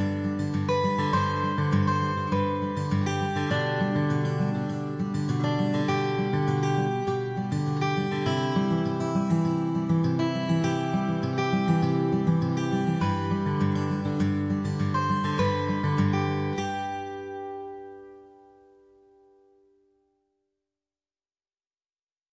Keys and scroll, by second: 0.9 ctrl+l, 0.9 |, 2.1-2.5 typing, 3.6 b, 4.9 x, 5.7 x, 5.8 ctrl+z, 6.7 ctrl+z, 12.2-17.4 typing, 19.3 x, 20.3 x, 20.4 ctrl+z, 21.0 x, 21.1 ctrl+z, 22.0 x.